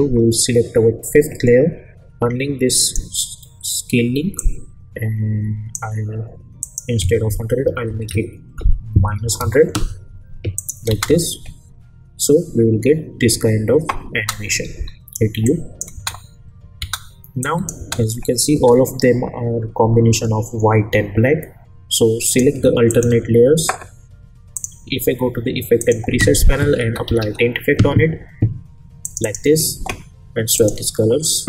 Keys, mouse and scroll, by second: 2.8-5.9 drag, 10.5 click, 10.9 space, 14.1 space, 14.7 u, 15.4-16.0 click, 15.9 space, 17.4 click, 17.8 space, 22.2 click, 22.9 ctrl+click, 24.5 click, 26.4-27.7 typing, 29.0 click, 29.0 click.